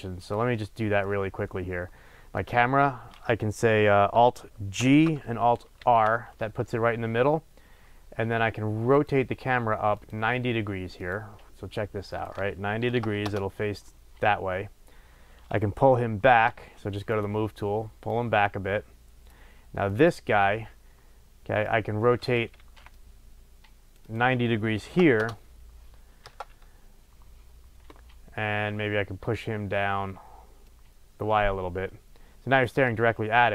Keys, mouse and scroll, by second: 0.1 click, 0.6-2.3 middle drag, 1.1 scroll up 2, 1.3-2.3 scroll down 2, 2.3 click, 4.8 alt+g, 5.8 alt+r, 7.8-9.0 scroll up 1, 9.0 click, 10.0 click, 11.0 click, 12.1-18.1 drag, 13.3 Return, 19.3 click, 21.6-22.6 drag, 22.6 ctrl+z, 25.3 Return, 25.5-30.6 drag, 26.3 KP_0.